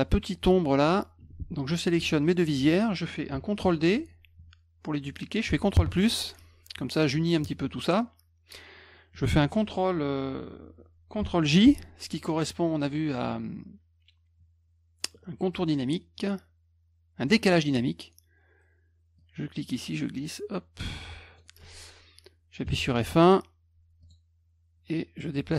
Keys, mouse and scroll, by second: 1.2 F2, 1.7 click, 2.2 shift+click, 3.6 ctrl+d, 12.8 click, 17.5 click, 19.2-21.4 drag, 24.0 click, 24.9-25.5 drag.